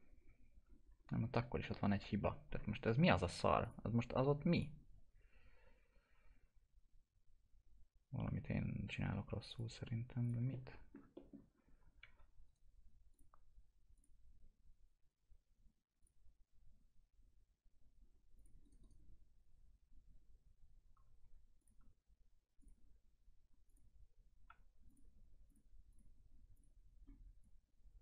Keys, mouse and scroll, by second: 0.9-1.6 scroll up 1, 1.6 middle click, 1.9 F4, 3.6 click, 9.4 click, 11.1 middle click, 11.5 scroll up 1, 11.9 1, 12.4 right click, 13.1 click, 18.3 click, 18.6 right click, 20.9 1, 21.5 click, 24.4 2, 24.8 click.